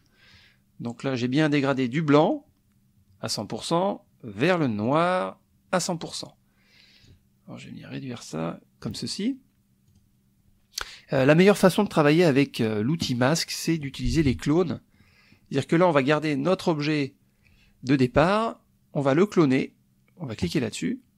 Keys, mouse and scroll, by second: 2.2 click, 4.8 click, 7.0-9.0 drag, 9.9 click, 14.3 KP_Subtract, 15.0 click, 15.3 middle click, 15.7 click, 20.4 click.